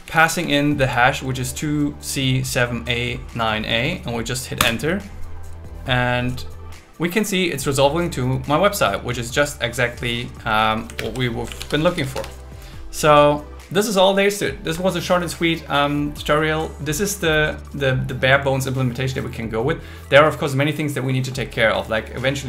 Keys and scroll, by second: 4.6 Return, 11.0 alt+space, 12.5 Return, 12.7 Return.